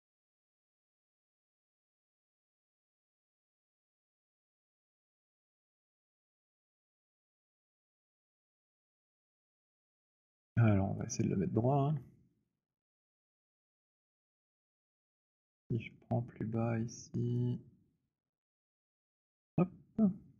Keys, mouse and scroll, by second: 0.5-3.0 scroll, 6.9 click, 9.4-9.9 scroll, 10.4 alt+click, 11.1 click, 13.3 click, 14.4 alt+click, 15.2 middle click, 15.9 alt+middle click, 18.2 right click, 19.2 click.